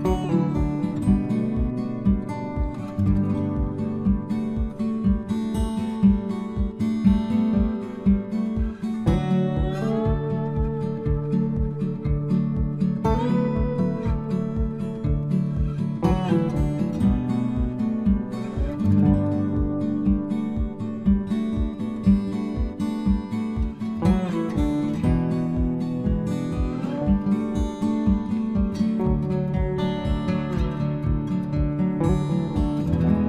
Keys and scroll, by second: 1.9 Return, 14.9 ctrl+c, 15.4 ctrl+f, 32.0 Return.